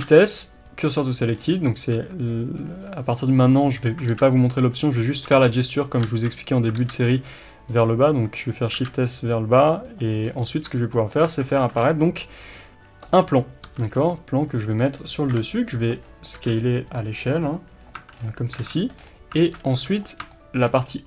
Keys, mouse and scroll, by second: 1.0 shift+s, 1.3-2.0 scroll down 1, 2.0 Tab, 3.5-5.0 scroll up 1, 5.0 shift+s, 10.2-10.5 scroll down 1, 10.5 Tab, 10.8 scroll down 1, 13.1 shift+a, 13.6 s, 14.7 click, 15.3 KP_7, 16.0-16.4 scroll up 1, 16.4 s, 17.9 Tab, 18.1 scroll down 1, 18.5 alt+a, 19.0-19.3 scroll down 1, 19.9 b, 20.3-21.0 shift+middle drag.